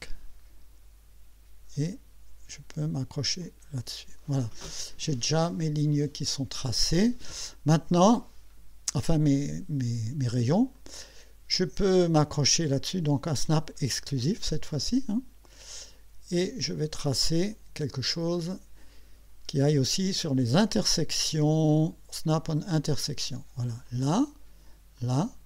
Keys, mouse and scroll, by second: 3.4 click, 10.8 click, 14.9 click, 16.7 click, 22.3 click, 23.9 click, 25.0 click.